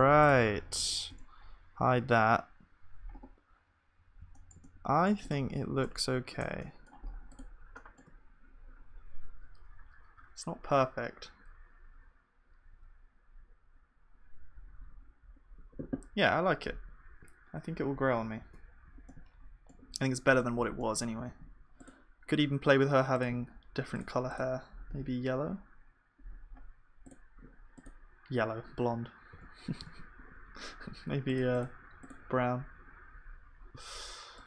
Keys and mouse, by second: 1.1 h, 1.8 middle click, 2.0 KP_1, 5.8 Tab, 6.4 Tab, 8.1 KP_1, 20.3 click, 20.3 middle click, 20.3-24.5 right drag, 20.9-27.2 drag, 20.9-24.5 middle drag, 21.3 ctrl+s, 29.3 ctrl+z, 29.3-34.4 drag.